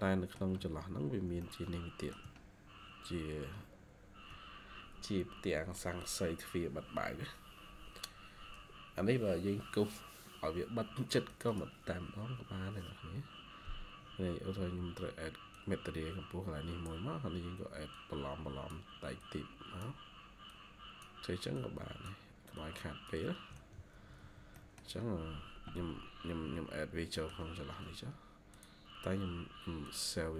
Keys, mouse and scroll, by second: 0.5 shift+scroll down 1, 1.3 shift+middle click, 11.4 double click, 12.5-13.3 scroll up 1, 13.3-14.3 scroll down 1, 15.2 ctrl+q, 15.4 ctrl+click, 19.1 ctrl+click, 23.7 ctrl+q, 23.9 Escape, 24.1 Escape, 24.4 middle click, 25.0-26.0 scroll up 1, 26.7-27.0 scroll down 1, 27.0 middle click.